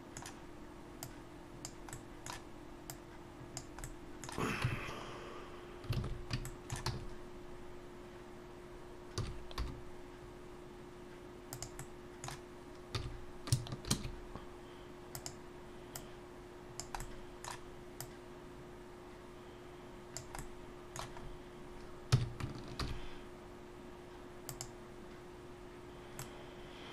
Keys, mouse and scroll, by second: 1.0 click, 1.9 middle click, 2.9 click, 3.8 middle click, 4.6 Tab, 5.1-5.6 scroll up 1, 6.0 alt+a, 6.4 shift+middle click, 6.9 a, 9.2 s, 11.8 middle click, 12.9 s, 15.9 click, 17.0 middle click, 18.0 click, 20.4 middle click, 21.1 scroll up 1, 22.1 scroll up 1, 22.1 s, 26.2 middle click.